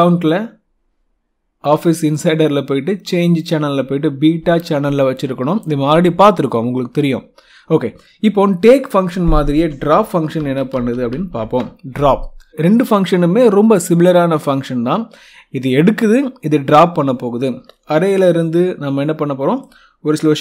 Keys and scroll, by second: 10.0-11.5 typing.